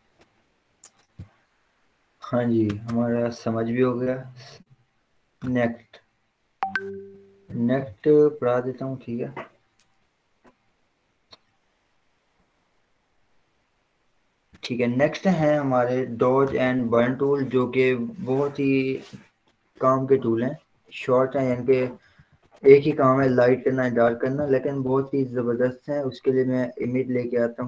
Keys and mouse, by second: 3.1 right click, 4.8 click, 5.8 right click, 9.0 click, 12.3 click, 13.6 click, 17.0 right click, 18.0 click, 21.3 click, 21.5 ctrl+0, 22.3 ctrl+w, 23.0 Down, 23.5 Return, 24.6 ctrl+o.